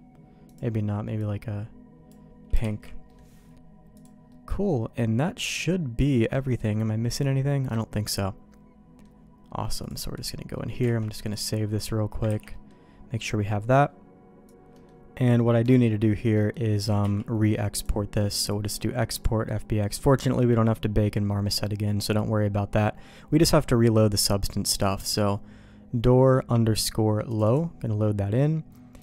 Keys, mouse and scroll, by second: 2.6 shift+k, 3.1 middle click, 3.9 click, 4.3-6.0 middle drag, 6.6 middle click, 7.6-9.0 middle drag, 9.8 click, 10.5 middle click, 10.8 alt+a, 11.3 click, 12.3 ctrl+s, 12.5 middle click, 14.7 middle click, 15.2 click, 15.5 middle click, 15.8 middle click, 16.3 middle click, 17.0 q.